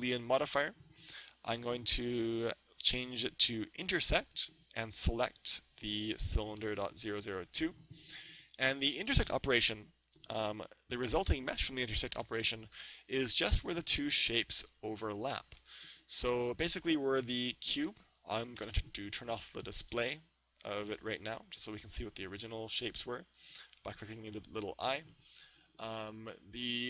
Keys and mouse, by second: 2.9-4.6 drag, 6.1-7.8 drag, 21.9-23.7 drag.